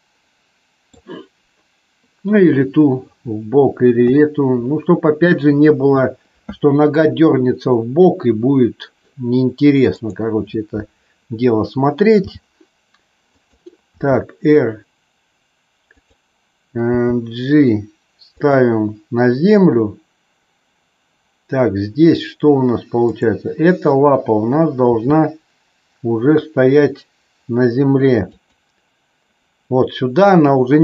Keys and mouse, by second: 0.1 middle click, 4.0 KP_3, 12.1 g, 13.4 click, 14.0 r, 15.8 click, 16.8 g, 18.4 click, 23.1 click, 24.7 r, 28.4 click.